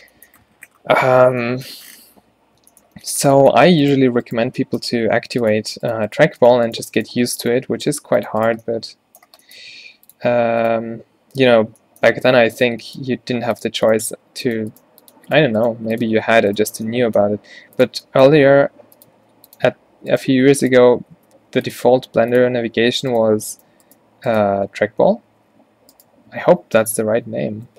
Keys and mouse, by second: 2.3 Tab, 5.0 e, 7.4 f, 7.9 g, 9.7 g, 10.9-13.1 typing, 14.2 g, 14.9 g, 15.8 g, 17.4 e, 18.5-21.9 typing, 24.8 z, 25.3 z.